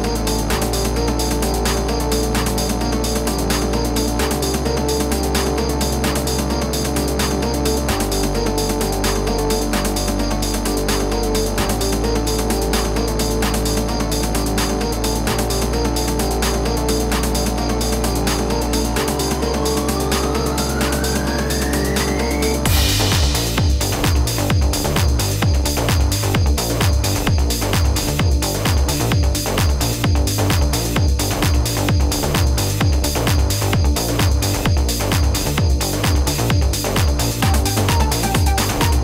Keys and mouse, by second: 0.6 click, 1.8 click, 3.6 click, 4.3 click, 5.9 click, 6.7 click, 8.5 click, 9.4 KP_8, 10.2 Return, 11.4 click, 12.6 click, 15.3 click, 16.1 ctrl+=, 16.5-17.4 typing, 16.6 click, 20.2 click, 27.3 typing, 27.7 F8, 32.8 z.